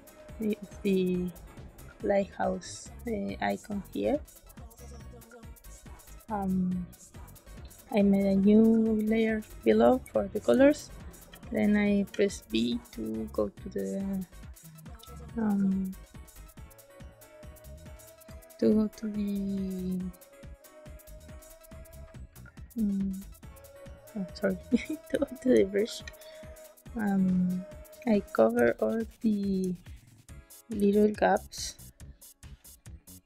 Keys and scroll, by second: 10.0 space, 11.2 b, 12.0 b, 14.8 z, 25.0 space, 26.0 b, 28.5 space, 30.7 space.